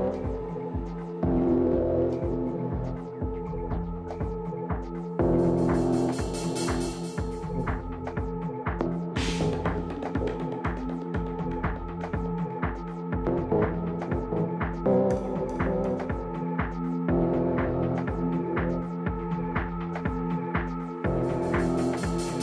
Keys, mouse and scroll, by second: 0.1-2.4 drag, 2.4 middle click, 3.0 click, 3.6-6.5 middle drag, 6.5 t, 7.1-9.2 middle drag, 7.5 a, 13.7 middle click, 14.6-16.0 right drag, 15.4-16.5 middle drag, 16.0 click, 16.5 right click, 16.5-17.8 middle drag, 20.7 Tab, 21.3 a, 22.2-22.4 middle drag.